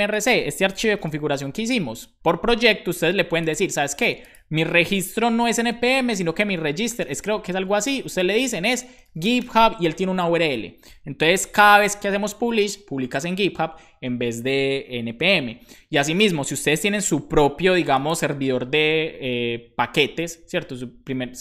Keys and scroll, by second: 1.1 super+b, 5.1 Return, 5.1-9.9 typing, 11.4 shift+super+Left, 16.9 super+s.